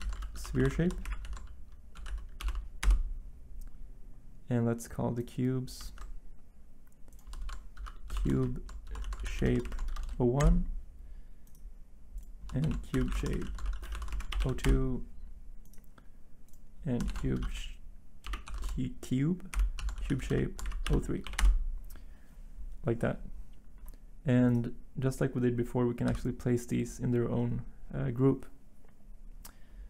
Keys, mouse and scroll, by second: 0.0-2.4 typing, 2.8 Return, 5.9 ctrl+z, 7.4-9.6 typing, 11.0 Return, 12.3-14.1 typing, 15.2 Return, 16.8-21.2 typing, 21.4 Return, 26.0 b.